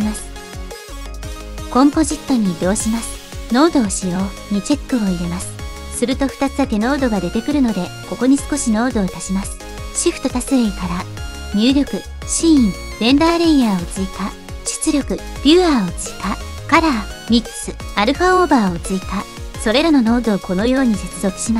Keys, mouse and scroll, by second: 0.8 middle click, 1.4 click.